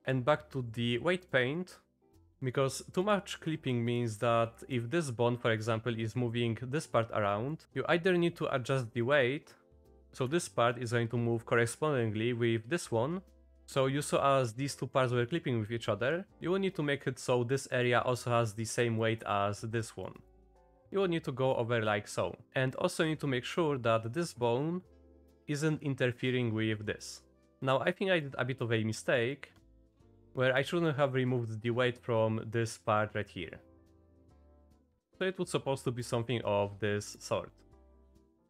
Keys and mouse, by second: 0.0-1.3 drag, 2.1 click, 3.0-4.2 drag, 4.7 click, 9.8 click, 17.0 click, 17.8 click, 19.1 click, 19.8 click, 20.3 click, 21.2 click, 22.0 click, 25.2 click, 25.8 middle click, 26.9 middle click, 28.1 middle click, 28.6 click, 29.5 click, 30.2 ctrl+z, 30.4 click, 30.9-34.6 drag, 34.8 shift+click, 35.1 ctrl+shift+z, 35.4 click, 37.1 click, 37.9 click.